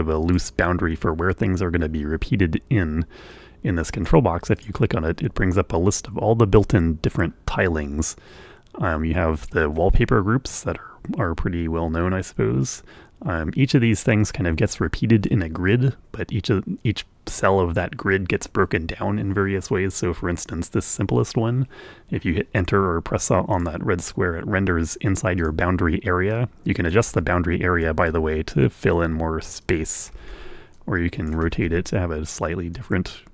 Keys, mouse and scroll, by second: 1.9 click, 5.0 click, 6.2 click, 21.9 click, 25.1 click, 27.0 click, 27.9 right click, 28.6 Return, 29.1 Return, 31.1 click, 31.7 Return, 31.7 right click, 32.3 right click, 32.3 click, 32.8 Return.